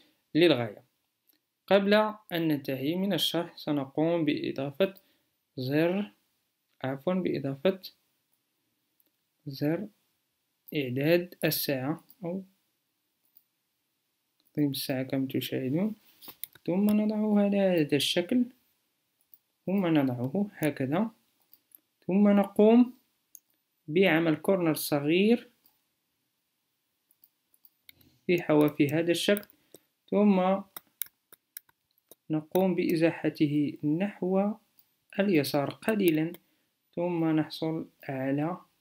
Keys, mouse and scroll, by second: 7.7 m, 27.3 a.